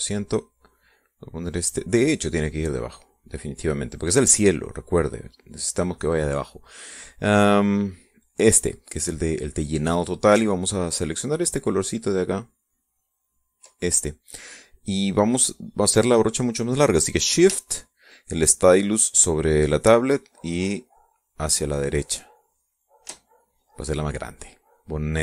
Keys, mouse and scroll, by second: 0.0 click, 1.0 click, 2.4 click, 3.8-6.2 drag, 8.9 click, 11.3-14.4 ctrl+drag, 15.9 middle click, 20.6-23.8 shift+drag, 24.9 middle click.